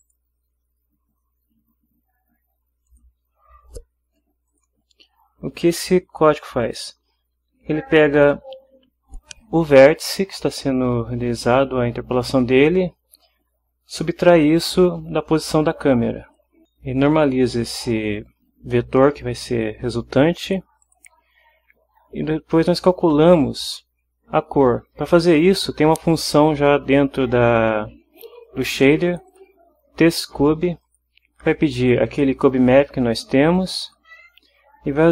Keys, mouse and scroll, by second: 0.0 click, 2.9 click, 4.5 click, 6.6 click, 15.9 click, 20.2 click, 20.8 click, 29.1 click, 30.8 click, 31.8 click, 33.8 click, 35.0 click.